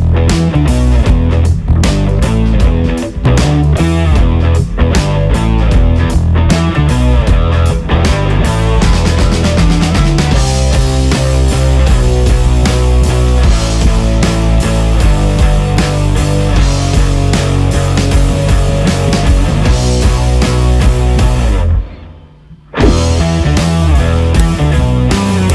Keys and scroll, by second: 10.1 ctrl+shift+KP_Subtract, 10.3 KP_Add, 10.6 Return, 11.5 ctrl+t, 15.0 ctrl+KP_Add, 15.5 ctrl+KP_Subtract, 15.7 space, 18.7 Return, 19.1 ctrl+KP_Subtract, 22.8 ctrl+KP_Add.